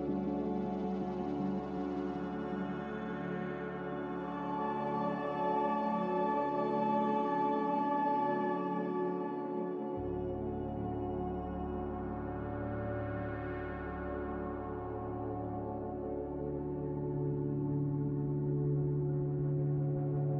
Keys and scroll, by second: 1.4 r, 2.2 a, 4.5 ctrl+c, 15.4 m, 16.8 a.